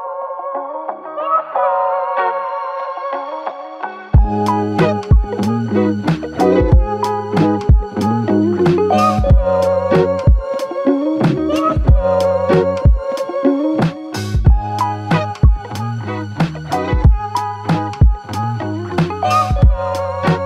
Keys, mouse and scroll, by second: 0.4 ctrl+n, 6.3 double click.